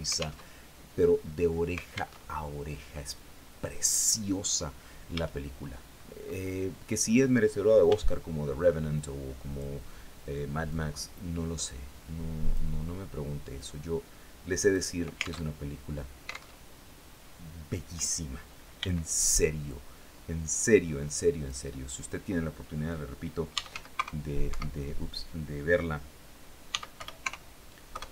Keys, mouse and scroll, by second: 1.6 alt+Tab, 4.6 a, 5.4 scroll up 2, 7.3 b, 8.4 click, 10.1-12.2 drag, 13.0-14.4 drag, 14.9 alt+Tab, 16.0 alt+Tab, 18.2 b, 19.1-21.1 drag, 22.7-23.6 typing, 23.9 Escape, 26.1 s, 26.4 y, 26.6 KP_0, 27.3 KP_Enter.